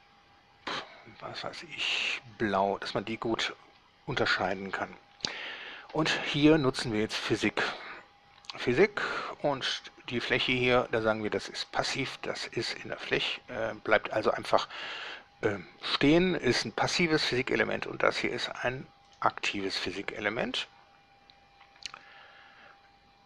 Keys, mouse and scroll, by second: 0.0 drag, 2.1 click, 4.7 right click, 8.8 click, 11.9 click, 17.6 right click, 19.3 click.